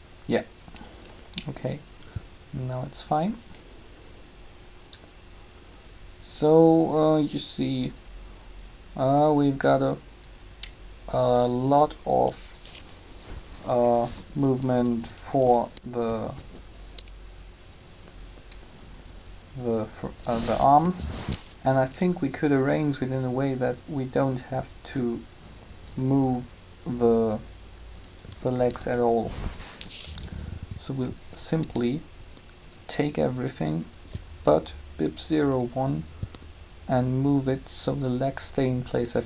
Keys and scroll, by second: 14.3 Up, 20.8 3, 28.3 Up.